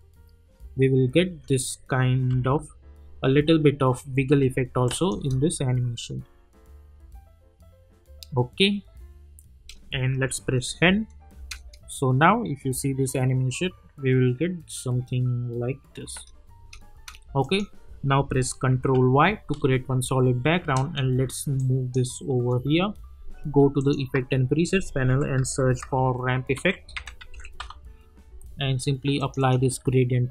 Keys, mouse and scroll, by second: 2.3 -, 2.7 -, 4.3 space, 4.8 click, 5.1 space, 9.5 space, 10.5 n, 11.4 space, 16.1 space, 17.4 click, 18.8 ctrl+y, 20.6 Return, 21.6-23.8 drag, 24.1 ctrl+a, 24.8-28.1 typing, 26.5 ctrl+a, 29.2-30.3 drag.